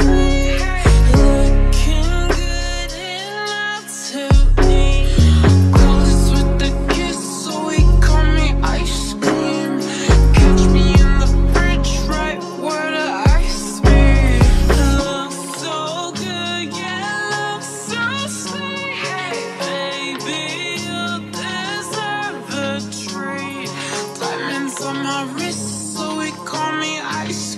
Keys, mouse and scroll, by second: 1.6 s, 5.8 u, 11.0-12.4 typing, 17.3-19.5 typing, 24.9 r, 26.3 u.